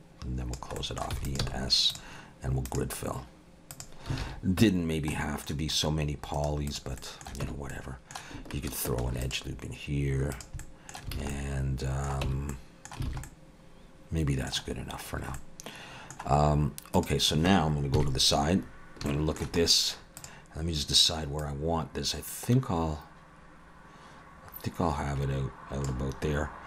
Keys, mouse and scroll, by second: 0.8 middle click, 1.1 e, 1.5 s, 2.7 click, 4.2 alt+a, 4.6 Tab, 5.1 middle click, 5.8-6.4 scroll up 1, 6.4 right click, 7.0 middle click, 7.4 Tab, 7.7 middle click, 9.1 ctrl+r, 10.6 middle click, 11.2 alt+a, 11.3 middle click, 12.3 Tab, 12.5 middle click, 13.1 alt+a, 13.3 middle click, 14.7-15.3 scroll down 4, 15.4 middle click, 17.0 click, 18.0 KP_3, 18.6-19.1 scroll up 3, 19.1 shift+middle click, 19.6 scroll up 2, 20.2 click, 21.4 click.